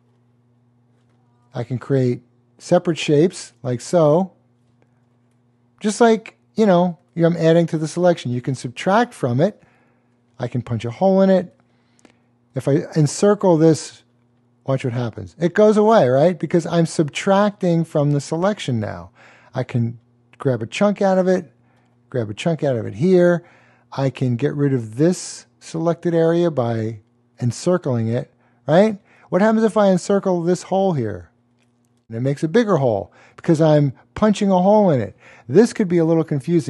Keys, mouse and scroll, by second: 0.1 click, 8.6 click, 13.3 click, 16.0 click, 19.3 click, 30.1 click, 36.5 click.